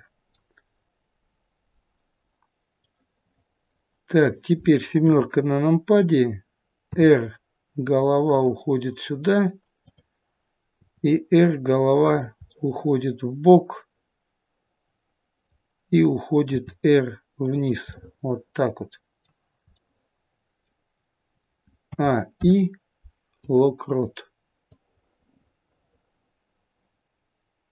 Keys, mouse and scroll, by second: 2.3 middle click, 2.3 click, 2.7 middle click, 5.0 KP_7, 6.7 r, 9.7 click, 10.8 r, 12.4 middle click, 16.4 r, 17.8 middle click, 19.7 middle click, 21.8 a, 22.2 i, 24.6 click.